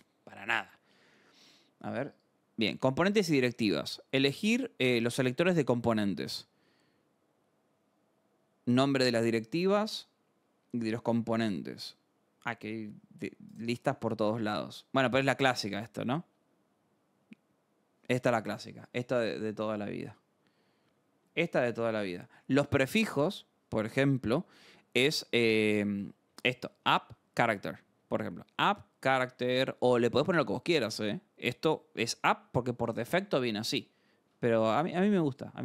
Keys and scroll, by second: 0.9 scroll, 20.0 scroll, 21.5-23.3 scroll, 24.6 alt+Tab, 25.7-30.4 typing, 29.1 Escape, 34.2 alt+Tab.